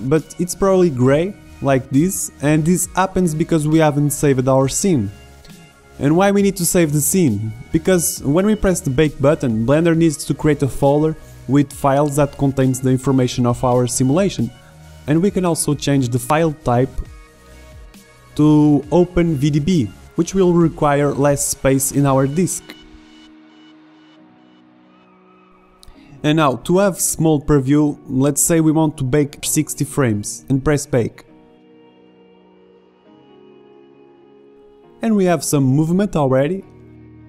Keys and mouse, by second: 5.0-13.3 middle drag, 13.3-18.8 drag, 20.2-21.4 middle drag, 22.4 click, 24.6-25.9 middle drag, 27.9-29.0 drag, 29.1-30.7 middle drag, 32.2-33.9 drag, 35.6 alt+a.